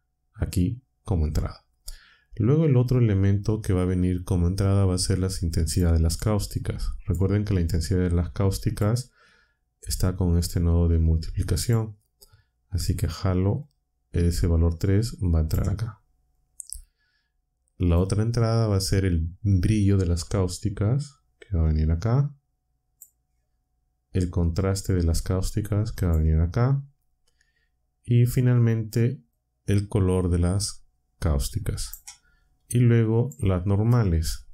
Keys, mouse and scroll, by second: 2.6-5.9 drag, 6.1-7.2 drag, 7.9-8.9 drag, 10.1-11.8 drag, 13.6-15.6 drag, 16.3-18.1 drag, 21.6-23.1 drag, 24.5-26.2 drag, 29.3-32.0 drag, 33.2 click.